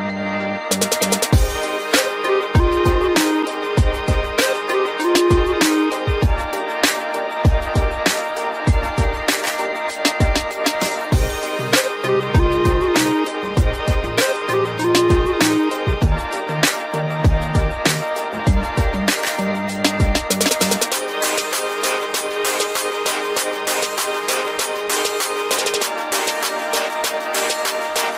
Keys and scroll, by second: 13.3 ctrl+0.